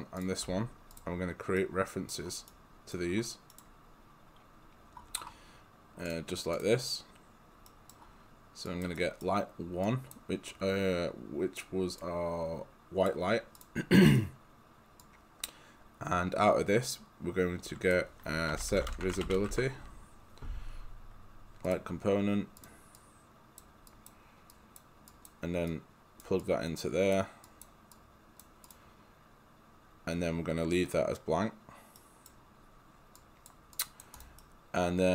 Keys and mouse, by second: 0.2 shift+click, 0.9 click, 1.6 right click, 6.1 click, 7.7 right click, 8.7 click, 9.0 right click, 9.9 click, 14.0 right click, 15.0 click, 18.3-20.0 typing, 21.7 click, 32.0 right click, 33.2 click, 34.4 right click.